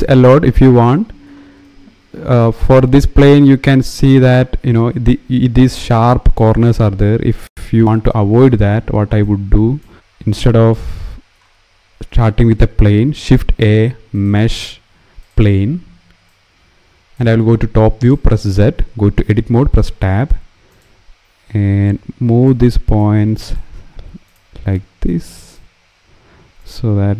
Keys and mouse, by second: 1.4 shift+middle click, 2.4 middle click, 8.9 click, 12.9 shift+a, 16.0 click, 17.7 click, 19.1 Tab, 20.5 click, 26.3 click.